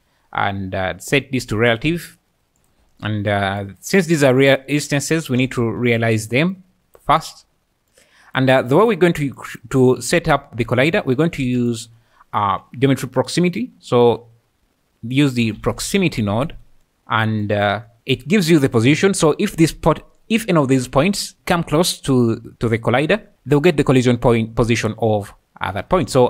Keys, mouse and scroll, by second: 0.0-26.2 typing, 1.1 click, 2.3-4.1 drag, 7.3 drag, 9.4 click, 16.8 click, 17.4 click, 17.9 click, 23.3-23.7 middle drag, 26.1 middle click.